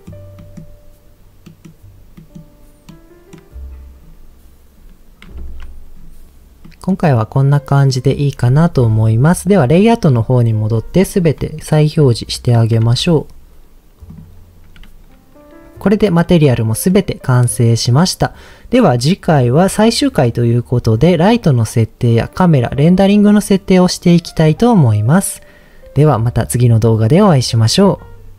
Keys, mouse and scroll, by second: 0.4 middle click, 1.4 middle click, 2.1 middle click, 2.8 middle click, 4.0-4.7 scroll up 2, 4.7-5.3 scroll up 2, 5.4 ctrl+s, 5.9-6.3 scroll down 1, 6.6 middle click, 7.5 middle click, 9.9 click, 11.1-12.2 scroll down 1, 12.8 alt+h, 14.7 click, 15.8 scroll up 1, 15.9-17.0 middle drag.